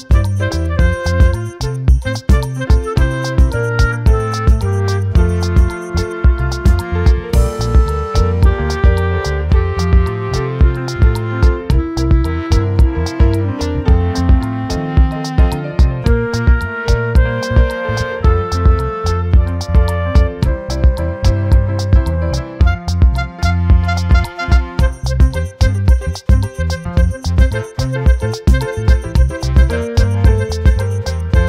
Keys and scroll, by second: 13.4 ctrl+t.